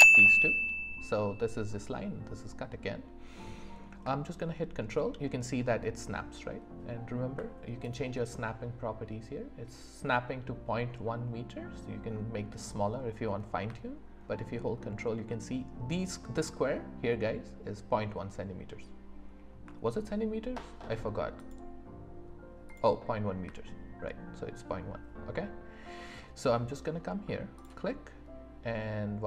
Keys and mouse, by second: 7.8-12.5 drag, 21.5-22.6 drag, 27.6 ctrl+click.